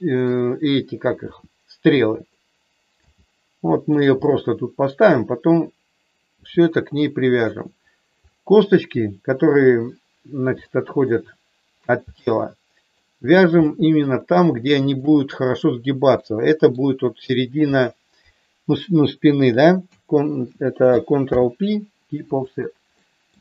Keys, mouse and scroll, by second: 1.3 r, 2.1 click, 2.9 g, 3.8 click, 4.3 middle click, 6.3 r, 7.3 click, 10.6 shift+middle click, 12.1 middle click, 13.6 shift+middle click, 14.7 shift+click, 16.1 middle click, 21.2 ctrl+p, 23.0 middle click.